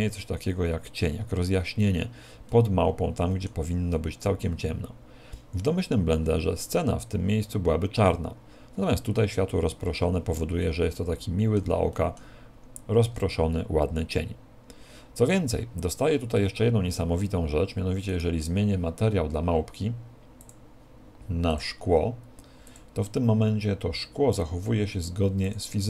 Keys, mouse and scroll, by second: 2.5 middle click, 3.9 middle click, 10.9 middle click, 11.9 middle click, 13.1-13.8 scroll up 5, 18.7 right click, 20.5 click, 21.5 click.